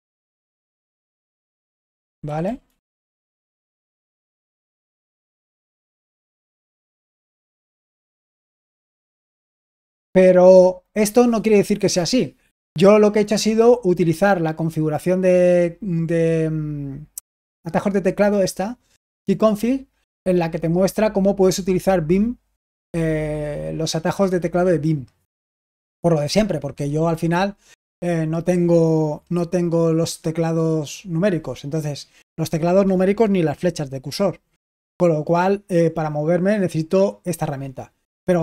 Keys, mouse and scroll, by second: 0.0-3.2 typing, 4.5-5.0 typing, 6.2 typing, 7.8-10.0 typing, 24.6-27.8 drag, 27.8-38.4 scroll down 1.